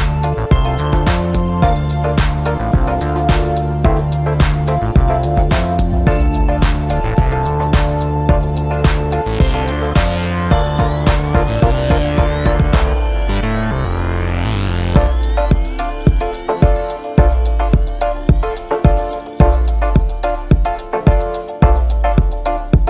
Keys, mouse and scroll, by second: 0.3 click, 4.0-7.0 drag, 7.1-10.2 drag, 12.7-13.7 scroll down 2, 13.7-16.1 middle drag, 16.1 click, 17.2-18.0 scroll up 1, 18.0 click, 18.9-22.1 middle drag.